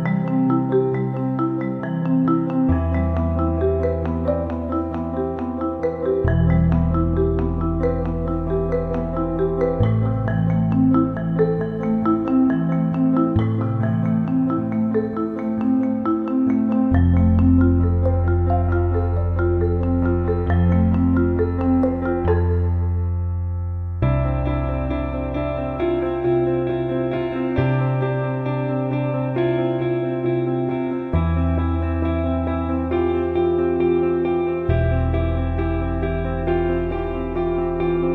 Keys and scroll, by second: 0.0 y, 18.7 Left, 19.0 Left, 19.3 Left, 20.1 Down, 27.8 Down, 28.1 Down.